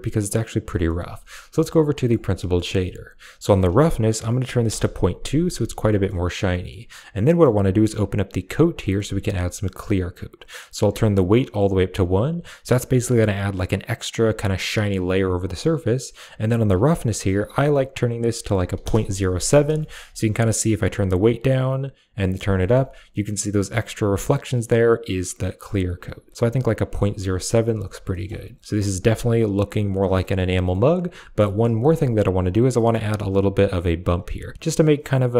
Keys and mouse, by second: 0.2 middle click, 0.6 middle click, 1.2 middle click, 3.3-4.6 drag, 5.7 middle click, 7.1 middle click, 8.4 click, 8.7 middle click, 10.6-11.8 drag, 16.3 click, 19.7 shift+middle drag, 20.6-22.0 drag, 22.4 shift+middle drag, 25.5 click, 28.0 shift+middle click, 28.8 click, 30.1 middle click, 30.4 middle click, 32.6 middle click.